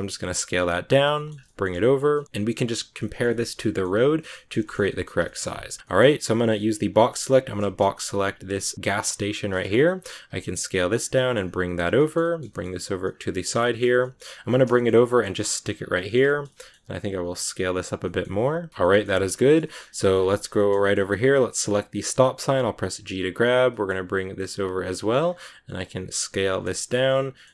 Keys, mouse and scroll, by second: 1.0 shift+middle click, 1.3 g, 2.0 middle click, 2.3 scroll up 1, 2.4 middle click, 2.6 scroll down 1, 2.7 scroll up 1, 2.9-4.5 middle drag, 4.5 shift+scroll up 1, 4.5 shift+middle click, 5.4-5.8 scroll up 2, 5.8 middle click, 6.7 b, 9.1 middle click, 9.5 scroll up 3, 9.6 middle click, 10.2 s, 11.8 scroll down 1, 11.9 shift+middle click, 12.3 scroll up 1, 12.4 g, 13.2 scroll down 2, 13.3 shift+middle click, 13.9 g, 14.6 shift+middle click, 15.2 g, 15.8 shift+middle click, 16.3-17.0 scroll up 2, 16.4 middle click, 17.0 s, 17.9-19.2 middle drag, 18.7 scroll up 1, 19.2 scroll down 2, 19.3 shift+middle click, 20.0 scroll down 1, 20.1 shift+middle click, 20.8-21.3 scroll up 2, 21.6 right click, 21.8 scroll down 2, 22.0 shift+middle click, 22.8 g, 24.9-25.6 scroll up 2, 25.6 s, 26.5 middle click, 27.0 g.